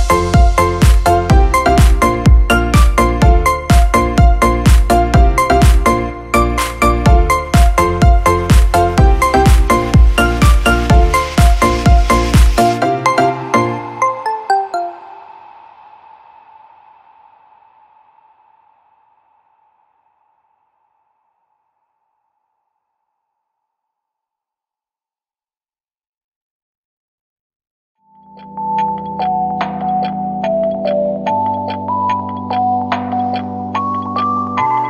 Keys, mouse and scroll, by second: 11.1 space.